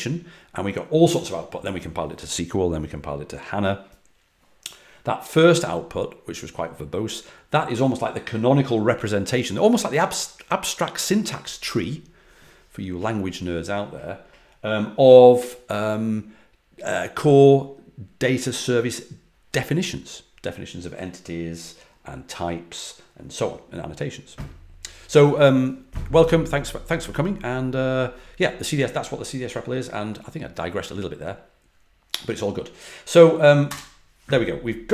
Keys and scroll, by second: 33.6 Return.